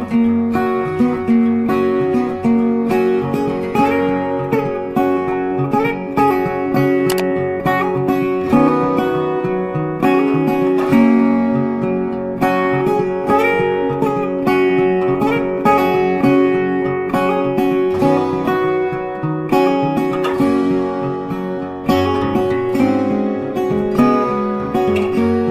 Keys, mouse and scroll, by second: 0.3 ctrl+space, 0.4 ctrl+click, 1.8 double click, 2.5 double click, 5.6 double click, 5.9 ctrl+space, 6.9 ctrl+z, 8.2 ctrl+g, 9.6 shift+click, 11.2 space, 11.3 double click, 11.6 ctrl+click, 12.0 ctrl+click, 13.1 space, 13.3 ctrl+click, 15.1 shift+click, 15.9 space, 16.0 double click, 16.6 right click, 17.6 double click, 21.2 double click, 21.4-21.7 scroll down 1, 22.9 double click, 24.2 shift+click.